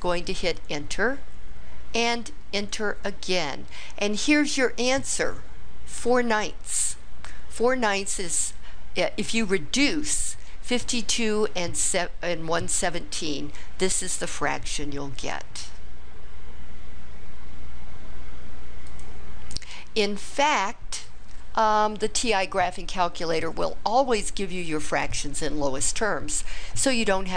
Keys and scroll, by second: 0.6 Return, 2.6 Return.